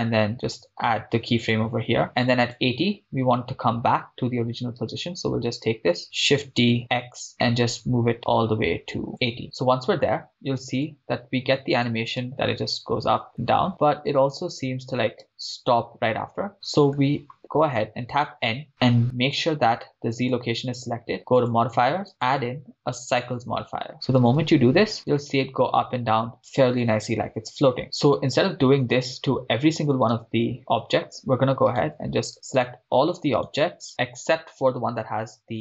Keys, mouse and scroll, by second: 1.5 click, 2.5 click, 4.8 click, 4.8 right click, 6.3 shift+d, 7.1 x, 9.1 click, 9.9-10.5 scroll down 2, 11.0-12.1 drag, 12.3 shift+space, 15.3 shift+space, 16.4 scroll down 2, 16.5-17.4 middle drag, 17.7 n, 18.7 click, 19.4-20.2 drag, 21.5 click, 23.4 click, 24.2 shift+space, 28.9-30.0 scroll down 1, 30.0 scroll down 2, 30.2 shift+space, 32.0 right click, 33.4 right click, 33.9 shift+right click.